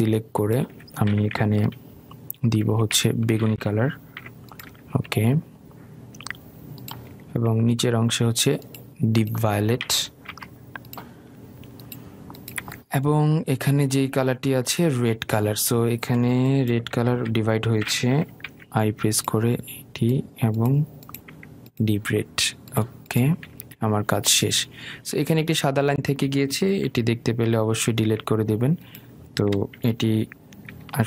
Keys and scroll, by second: 2.0 i, 20.6 i, 28.1 Delete.